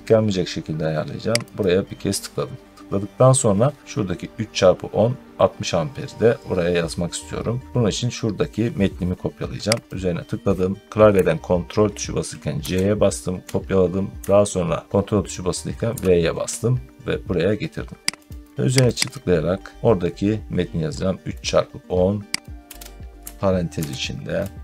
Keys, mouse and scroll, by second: 1.4 click, 2.4 middle click, 3.4 middle click, 6.5 middle click, 9.7 click, 12.4 ctrl+c, 15.7 ctrl+v, 18.1 click, 18.8 click, 19.0 click, 22.3-24.6 typing, 22.6 click.